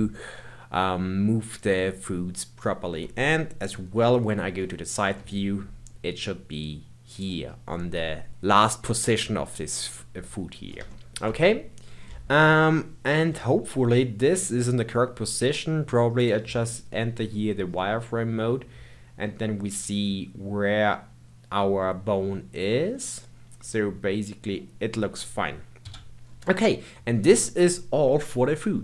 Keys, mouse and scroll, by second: 3.7 KP_3, 5.0 g, 10.9 shift+middle click, 11.9-12.4 scroll down 1, 12.4-15.5 shift+middle drag, 16.2 click, 17.3-17.7 scroll down 1, 17.7-20.8 middle drag, 25.8 KP_1, 26.2-28.1 scroll down 2.